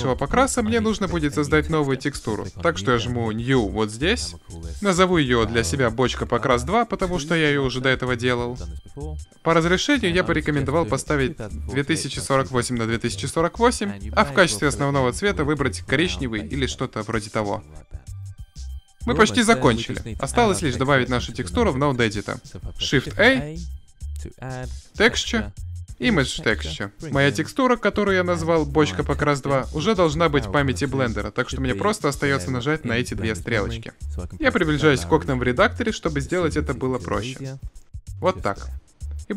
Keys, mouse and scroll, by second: 2.8 click, 5.1 r, 8.1-11.8 drag, 21.6 middle click, 22.1 drag, 22.3 shift+a, 26.8-31.5 drag, 35.0-37.1 scroll up 1, 37.1 click.